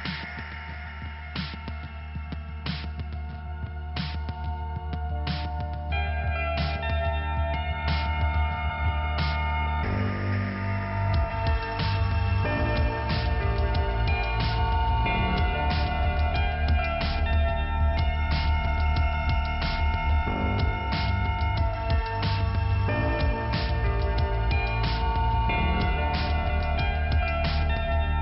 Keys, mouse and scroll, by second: 1.6 click, 1.8 click, 3.0 scroll down 1, 4.1 click, 4.2 click, 4.8 click, 5.7 scroll up 1, 5.9 click, 6.1 click, 9.4 scroll down 2, 10.4 click, 11.9 click, 12.0 click, 12.6 click, 13.5 p, 14.1 scroll down 2, 14.5 click, 14.6 click, 15.3 click, 21.7 right click, 21.8 right click, 22.8 click, 23.0 click, 23.4-24.3 scroll down 1, 24.3 click, 25.3 click, 25.4 click, 25.5 double click, 25.5 click, 25.9 double click, 26.0 double click, 26.1 double click, 26.2 double click, 27.1 double click, 27.2 double click, 27.9-28.2 scroll up 1.